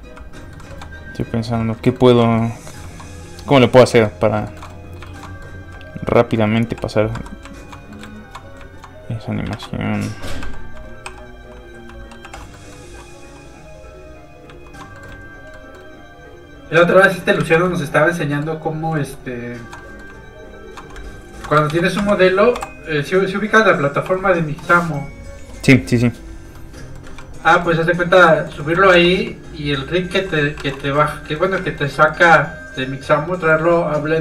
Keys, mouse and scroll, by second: 0.4 middle click, 0.7 shift+middle click, 1.8 click, 1.9 shift+middle click, 2.4 middle click, 2.5 middle click, 3.4 shift+click, 3.9 shift+middle click, 5.2 middle click, 5.3 middle click, 6.1 click, 6.3 middle click, 6.7 g, 7.1 Escape, 7.5 shift+click, 7.9 click, 8.2 shift+click, 9.5 alt+shift+a, 10.4 a, 10.5 2, 10.7 1, 11.0 3, 12.2 alt+h, 12.6 middle click, 12.9 1, 14.1 click, 14.9 alt+middle click, 15.0 middle click, 15.2 shift+click, 15.5 shift+middle click, 16.1 shift+click, 16.6 shift+click, 17.0-17.3 scroll down 1, 17.4 ctrl+z, 18.0 shift+click, 18.3 shift+middle click, 18.7 shift+click, 19.0 shift+middle click, 19.8 middle click, 19.9 middle click, 20.4 shift+click, 21.7 ctrl+shift+d, 22.0 Escape, 22.5 m, 23.8 click, 24.0 3, 26.5 middle click, 26.8-27.2 scroll up 2, 26.9 middle click, 27.2 shift+middle click, 27.6 middle click, 27.7 middle click, 28.6 shift+middle click, 28.9 middle click, 29.0 q, 30.0 alt+click, 30.6 alt+a, 30.8 shift+middle click, 31.1 middle click, 31.2 middle click, 31.6 shift+middle click, 31.9 middle click, 32.0 middle click, 32.9 click, 33.3 middle click.